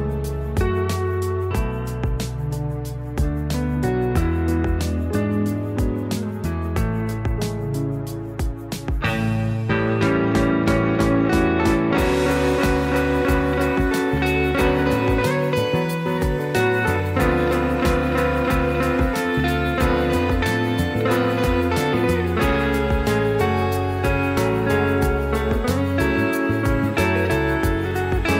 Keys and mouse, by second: 0.7 f, 0.9 middle click, 1.4 middle click, 2.0 middle click, 2.7 alt+click, 3.1 f, 3.3 middle click, 4.1 middle click, 4.4 middle click, 4.6 Tab, 5.5 click, 6.3 middle click, 6.6 click, 6.9 middle click, 7.1 Tab, 7.4 middle click, 8.1 click, 8.5 click, 8.7 middle click, 10.0 s, 11.4 shift+middle click, 11.8 click, 12.5 ctrl+r, 13.9 s, 15.8 ctrl+r, 17.0 s, 18.0 ctrl+r, 19.2 s, 20.9 alt+click, 21.1 s, 22.6 middle click, 22.9 Tab, 23.3-23.8 drag, 24.0 middle click, 24.5 click, 25.0-25.5 middle drag, 26.1 middle drag, 26.7 click, 27.4 click, 27.6 click.